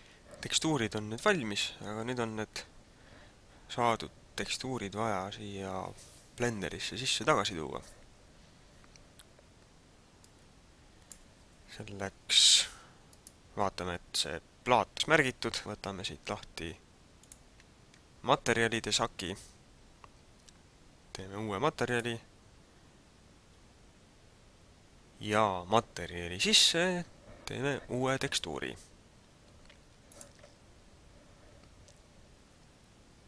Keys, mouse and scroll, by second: 10.3 click, 13.0 right click, 17.1 click, 21.9 click, 30.0 click.